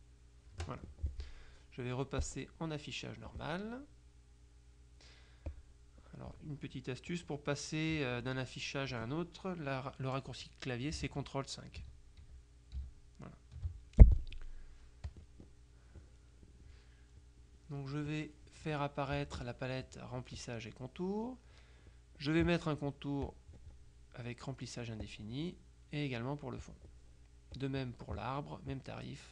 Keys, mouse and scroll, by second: 0.6 Delete, 2.3 click, 5.6 click, 11.8 ctrl+KP_5, 15.2 click, 17.5-18.7 drag, 19.2 click, 23.3 click, 25.2 click, 26.7 click, 27.6 click.